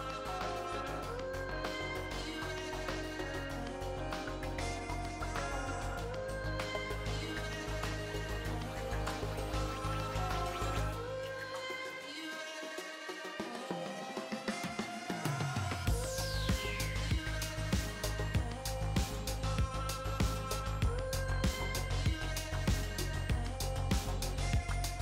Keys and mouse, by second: 1.4 a, 1.6 a, 2.8 Tab, 3.6-5.2 drag, 4.6 Tab, 5.2 middle click, 6.4 click, 8.4 ctrl+r, 9.5 ctrl+r, 12.1 ctrl+r, 13.3 ctrl+r, 17.0-18.8 middle drag, 20.4 middle click, 21.4-22.6 middle drag, 22.6 click, 23.9-25.0 drag.